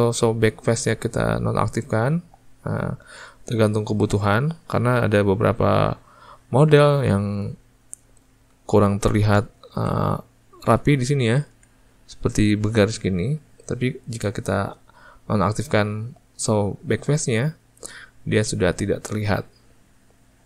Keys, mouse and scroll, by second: 1.0 click, 6.7 click, 9.1-17.5 ctrl+middle drag, 17.5 click, 19.6-20.4 ctrl+middle drag.